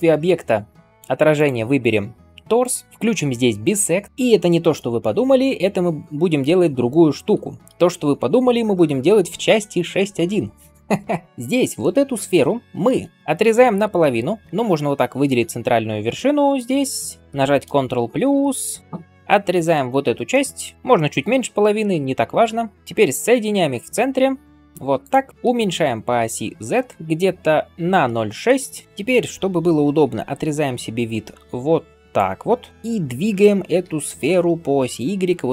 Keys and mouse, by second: 2.2-17.5 middle drag, 4.0 click, 4.1 ctrl+space, 7.2 r, 11.6 g, 12.9 Tab, 15.1 click, 16.1 alt+z, 17.5 KP_Add, 17.7 KP_Add, 17.9 KP_Add, 17.9 ctrl+middle click, 18.0 KP_Add, 18.2 KP_Add, 18.4 KP_Add, 19.0 x, 22.4 Tab, 22.7 KP_1, 23.0 g, 25.2-35.5 shift+middle drag, 30.0 alt+b, 33.7 g.